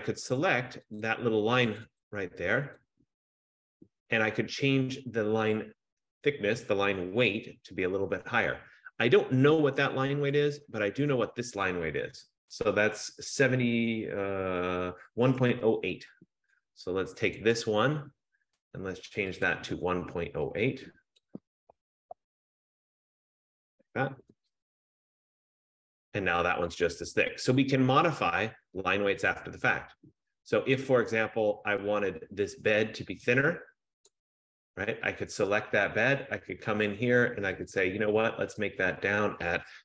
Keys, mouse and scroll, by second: 4.6 click, 10.5 click, 17.6 click, 19.6 click, 21.3 click, 21.7-23.3 typing, 24.3 Tab, 26.8 click, 28.7-30.1 scroll, 31.9 F15, 34.3 click, 37.7 click, 39.4 click, 39.7-39.8 typing.